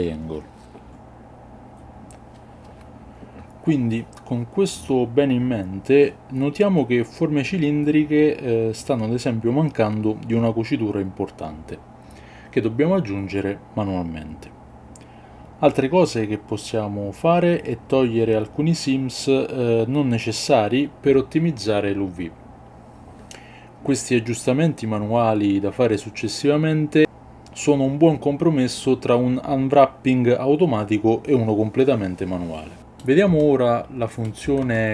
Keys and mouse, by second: 2.0 middle click, 4.9 ctrl+middle click, 6.1-7.2 middle drag, 7.6 middle click, 9.0 shift+middle click, 9.7 Tab, 10.6 alt+click, 13.6 click, 16.1-18.0 drag, 18.0 ctrl+middle click, 18.2 Tab, 18.4 Tab, 18.6 alt+click, 19.2 click, 19.8 middle click, 20.2 middle click, 20.8 shift+middle click, 21.0 middle click, 21.8 middle click, 21.9 shift+click, 22.4 middle click, 22.5 shift+click, 22.9 middle click, 32.8 middle click, 33.4 shift+middle click, 34.7 ctrl+middle click.